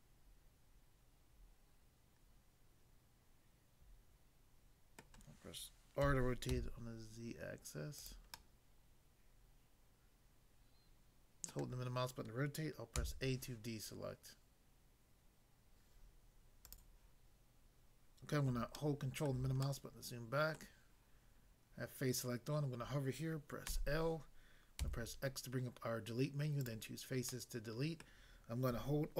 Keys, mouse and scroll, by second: 5.0 middle click, 6.0-6.5 typing, 8.0 click, 8.4 middle click, 11.5 middle click, 14.2 a, 16.7 click, 16.8 click, 18.8 ctrl+middle click, 23.7 l, 24.8 x, 26.6 click, 27.3 middle click, 28.0 middle click.